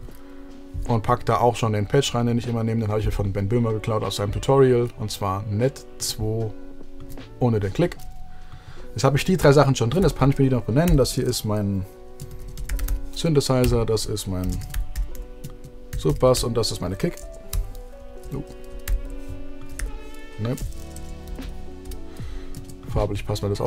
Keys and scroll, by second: 11.1-17.7 typing, 13.8 Tab, 19.1 super+z, 20.0 super+r, 20.9 Tab, 21.2 Right, 21.5 BackSpace, 22.1 Return.